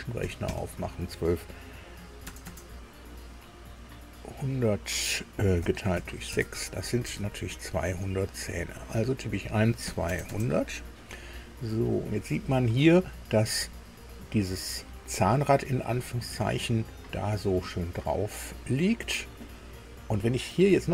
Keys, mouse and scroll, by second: 0.2 KP_1, 0.4 KP_2, 2.2 KP_0, 2.4 KP_0, 5.6 KP_Divide, 6.3 KP_Enter, 6.3 KP_6, 7.2 alt+Tab, 8.8 click, 9.8 KP_2, 10.0 KP_0, 10.6 KP_0, 11.8-12.6 scroll up 2.